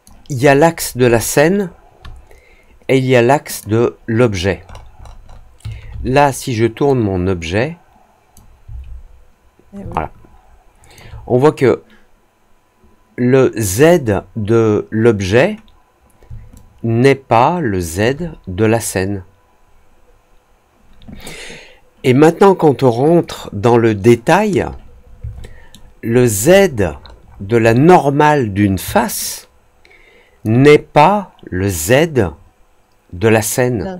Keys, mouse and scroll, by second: 0.3-1.6 alt+scroll down 4, 3.4 click, 4.6 middle click, 4.6-5.4 scroll up 3, 4.9 middle click, 5.2 middle click, 6.8-8.3 drag, 9.8-10.9 alt+drag, 16.5-17.9 alt+drag, 23.1 click, 25.3 alt+middle click, 26.1-27.1 alt+scroll up 4, 27.2 alt+middle click, 29.2-30.4 alt+drag.